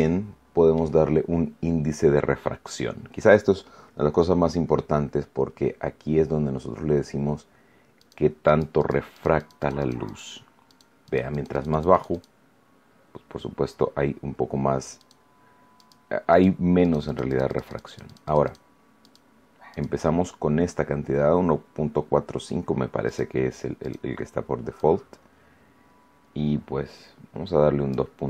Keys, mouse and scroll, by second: 7.9 click, 8.4 click, 9.1-10.3 drag, 10.6-12.3 drag, 14.9 click, 15.7 click, 16.3 click, 16.8-18.7 drag, 18.9 click, 19.7 click, 23.0 click, 23.7 click, 24.7-28.1 drag.